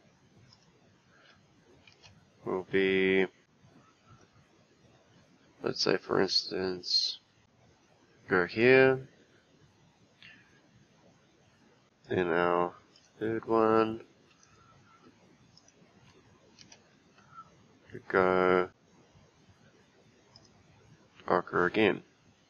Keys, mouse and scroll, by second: 1.9 g, 12.0 click, 13.0 click, 14.4-16.6 right drag, 16.6 g.